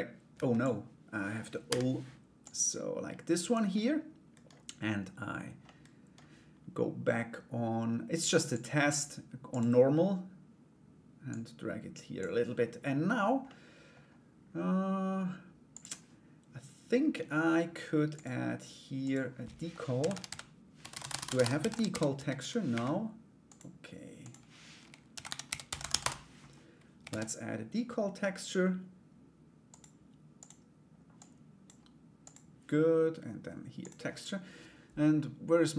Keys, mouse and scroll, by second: 2.0-3.1 drag, 3.3 middle click, 5.2 middle click, 8.2-9.2 drag, 10.9-13.0 drag, 13.0 middle click, 15.3 click, 18.7-22.5 drag, 20.5 BackSpace, 22.5 BackSpace, 23.0 click, 23.8-26.0 drag, 26.6 shift+a, 30.8 click, 31.8 click.